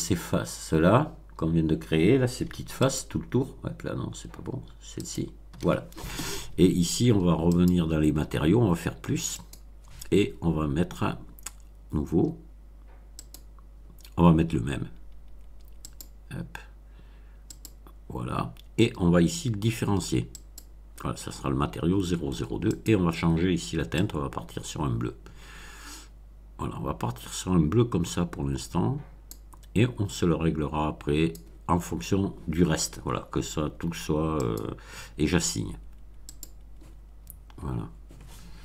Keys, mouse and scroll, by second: 2.8 alt+click, 5.0 alt+click, 7.5 click, 9.3 click, 13.2 click, 15.8 click, 17.5 click, 20.3 click, 22.7 click, 23.9-29.4 drag, 30.1-31.5 drag, 34.4 click, 36.2 click.